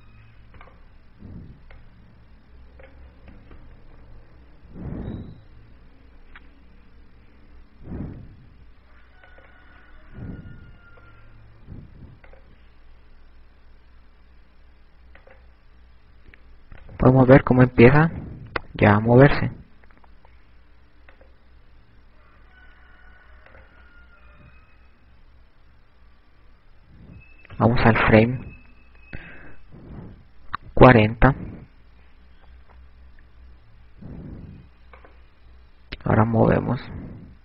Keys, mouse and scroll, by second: 0.6 i, 2.2 right click, 3.6 click, 4.9 i, 11.1 click, 36.2 right click.